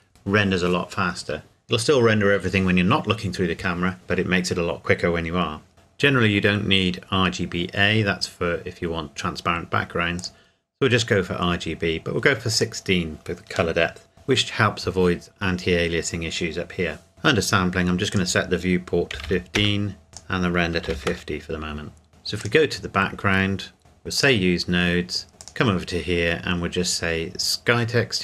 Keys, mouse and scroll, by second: 10.2 click, 12.5 click, 17.1 click, 19.1 KP_1, 19.3 KP_5, 19.6 KP_Enter, 20.1 click, 20.9 KP_5, 20.9 KP_0, 21.1 KP_Enter, 22.4 click, 24.2 click.